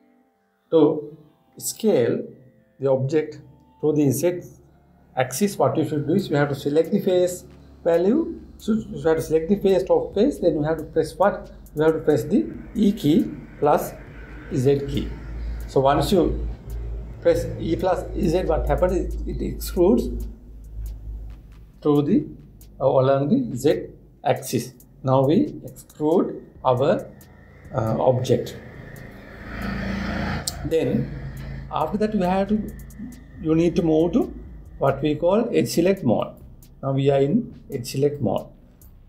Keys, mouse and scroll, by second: 36.8-39.0 drag.